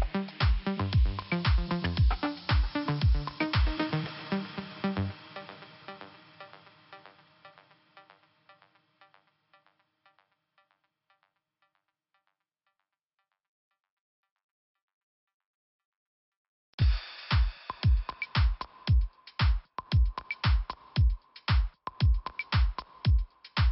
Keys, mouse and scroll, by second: 0.7 click, 0.8 click, 1.6 click, 3.3 click, 4.9 click, 5.8 click, 5.9 click, 6.5 click, 8.9 click, 11.0 click, 11.8 scroll down 2, 14.3 click, 16.0 click, 17.0 click, 17.1 click, 18.3 click, 22.2 click.